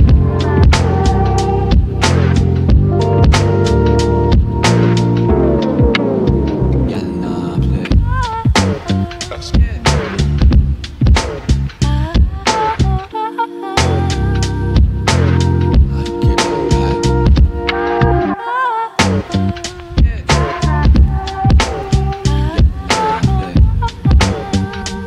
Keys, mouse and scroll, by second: 1.0 right click, 2.8 click, 6.0 click, 7.3 click, 7.7-8.0 scroll up 1, 8.0 typing, 12.9-22.9 drag, 22.9-25.0 drag.